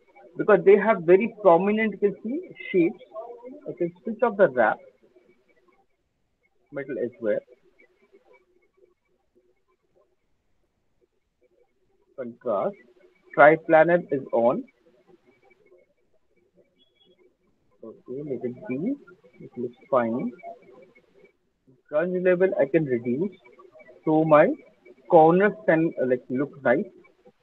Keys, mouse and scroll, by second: 0.2 alt+middle click, 0.5 alt+middle click, 1.2 alt+click, 1.4 alt+middle click, 1.7 alt+right click, 1.9 alt+right click, 2.2 alt+click, 2.9 alt+right click, 4.6 click, 5.4 click, 5.6 alt+click, 5.8 click, 6.0 alt+click, 6.3 click, 6.4 alt+click, 9.4 click, 12.3 click, 14.7 click, 16.2 click, 16.5 click, 17.4 click, 18.5 click, 19.0 click, 24.0 click, 24.9 alt+right click, 25.2 alt+scroll, 26.0 alt+click, 26.3 alt+middle click, 26.5 alt+middle click, 27.0 alt+middle click.